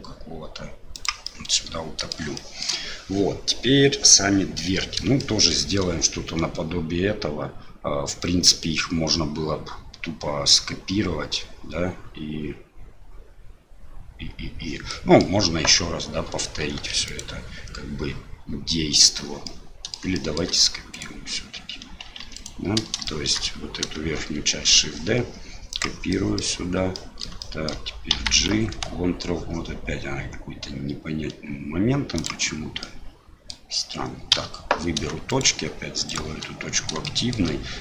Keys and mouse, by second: 0.9 e, 1.3 click, 2.5 shift+click, 5.3 shift+middle click, 14.9 middle click, 16.7 2, 16.8 2, 17.1 click, 19.5 middle click, 20.2 shift+middle click, 20.9 click, 22.4 right click, 23.1 shift+middle click, 24.5 shift+d, 26.2 middle click, 27.1 middle click, 27.5 shift+click, 33.0 click, 35.3 shift+right click, 36.1 shift+right click, 37.0 shift+middle click.